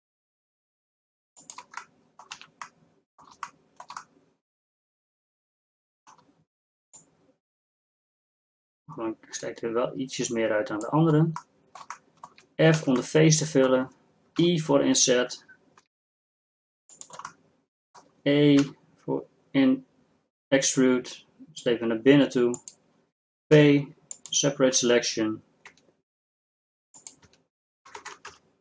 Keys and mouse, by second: 1.9 middle click, 2.6 middle click, 2.6 z, 7.1-9.6 drag, 11.7 click, 12.9 f, 14.5 i, 18.7 e, 23.6 p, 26.0 Tab, 26.8 Tab, 27.0 Tab, 28.1 Tab.